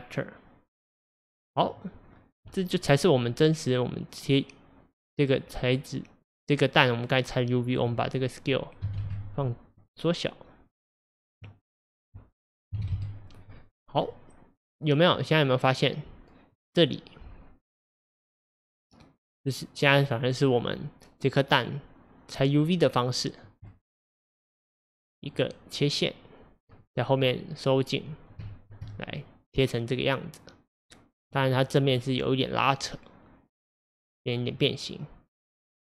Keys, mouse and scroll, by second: 2.1 scroll down 2, 2.5-5.4 middle drag, 5.4 scroll up 2, 6.7-8.0 scroll up 1, 9.1-14.0 drag, 14.0 scroll down 1, 14.1-28.1 middle drag, 28.1-28.5 scroll up 3, 28.5-31.6 shift+middle drag, 31.6-32.0 scroll down 1, 32.0-35.8 middle drag.